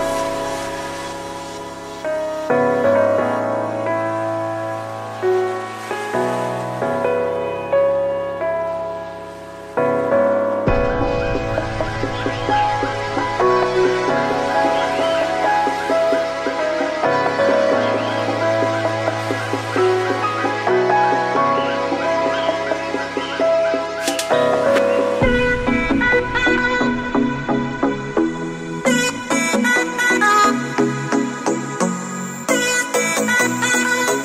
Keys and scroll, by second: 2.2 ctrl+j, 11.5 ctrl+0.